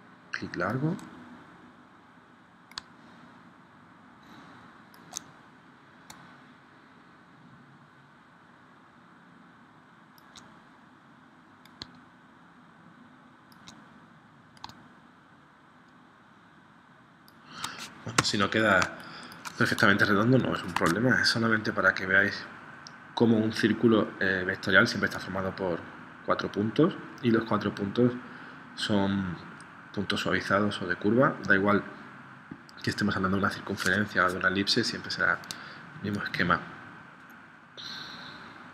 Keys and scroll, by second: 18.3 v, 18.8 space, 20.7 super+Tab.